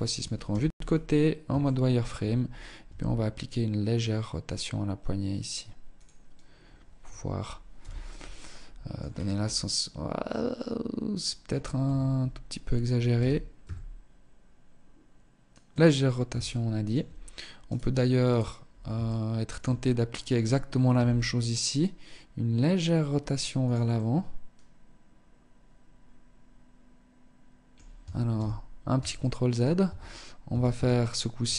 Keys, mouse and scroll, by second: 0.7 shift+middle click, 1.9 r, 5.2 click, 6.9 z, 7.5 middle click, 8.1-8.5 scroll down 6, 8.5 middle click, 10.9 KP_3, 12.3 r, 15.5 shift+middle click, 16.9 right click, 17.5 right click, 18.2 shift+middle click, 18.9 scroll up 3, 20.1 r, 23.0 middle click, 27.6 ctrl+z, 28.3 middle click, 29.1 Tab, 29.6 a, 29.9 a, 30.7 KP_3.